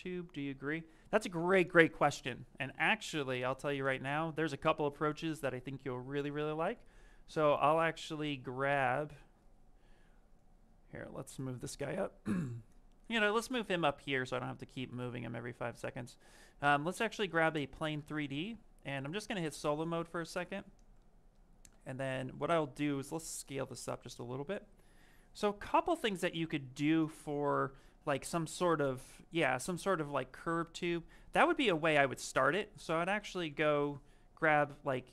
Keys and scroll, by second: 21.6 f, 25.8 s, 33.3 c.